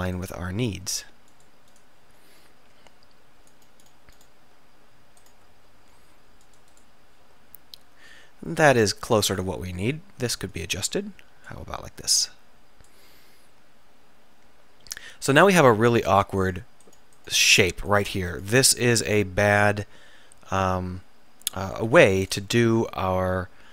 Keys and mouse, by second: 2.3-4.1 right drag, 3.9 click, 4.1 middle click, 5.9-6.9 middle drag, 6.9 click, 6.9 right click, 8.5 click, 9.4-11.6 drag, 10.6 right click, 14.1-15.2 middle drag, 18.0 right click, 18.4 right click, 21.9-23.2 drag, 23.2 middle click.